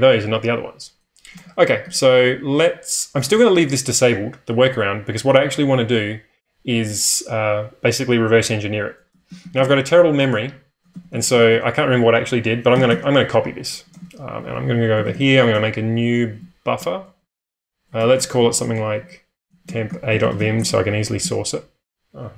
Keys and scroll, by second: 1.4 ctrl+space, 1.8 1, 9.2 typing, 10.8-20.3 typing, 14.0 ctrl+space.